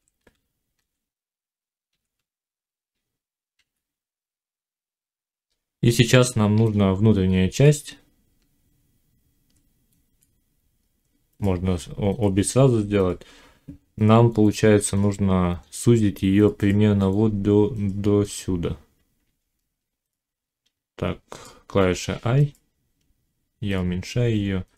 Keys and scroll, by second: 3.4 1, 4.3 5, 8.2 Tab.